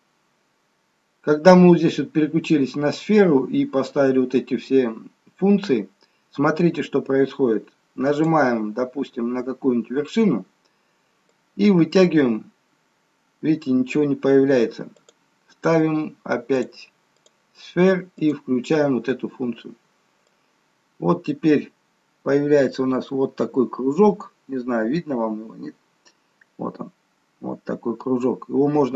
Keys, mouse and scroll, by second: 8.3 click, 15.0 click, 18.4 click, 20.3 click.